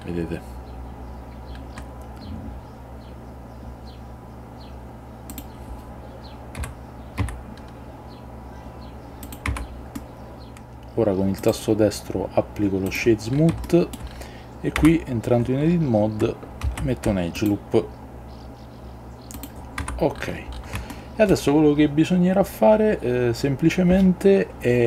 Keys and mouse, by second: 5.4 click, 6.7 g, 7.3 z, 9.3 click, 9.6 Tab, 10.1-11.1 middle drag, 10.5 ctrl+z, 11.6 right click, 13.7-14.1 shift+middle drag, 14.9 Tab, 16.7 ctrl+r, 19.5 click, 19.9 Tab, 21.0-21.4 middle drag.